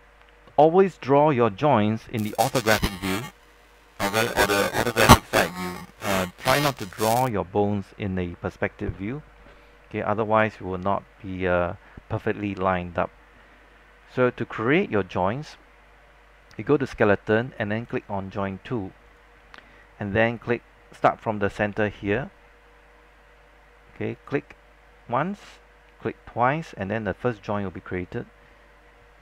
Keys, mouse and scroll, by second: 0.9-1.3 scroll up 1, 1.7 alt+middle click, 16.9 click, 21.5-22.1 scroll up 2, 24.3 click.